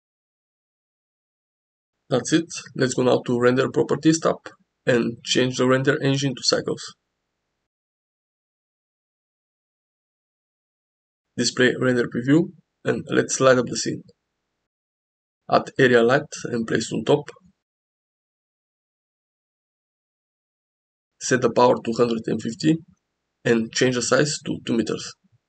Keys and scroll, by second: 2.4 g, 14.1 shift+a, 16.9 g, 17.2 z.